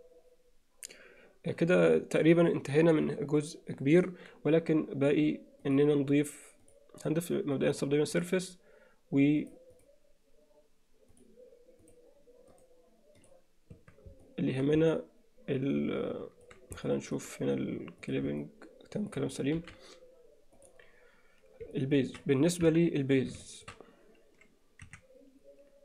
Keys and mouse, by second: 6.7-8.3 drag, 9.5 click, 9.8 click, 12.6-13.3 right drag, 13.8 Tab, 14.3 middle click, 14.9-16.5 middle drag, 16.9 middle click, 18.1 click, 18.5 middle click, 19.6 alt+h, 21.8 alt+middle click, 23.3 alt+KP_1, 23.5 shift+middle click, 24.9 1.